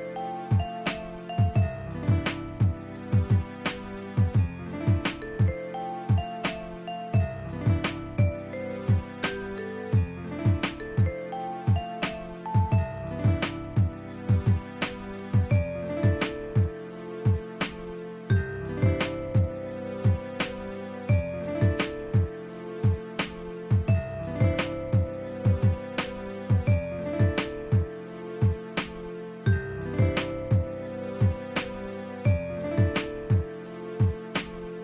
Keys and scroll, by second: 0.0 scroll down 1, 0.2 scroll up 1, 0.5 scroll down 1, 1.8 ], 2.1 [, 3.1 ], 6.2 scroll down 1, 6.3 scroll up 1, 6.9 [, 9.2 ctrl+z, 12.4 ], 13.9 scroll down 1, 18.9 scroll down 1, 19.6 [.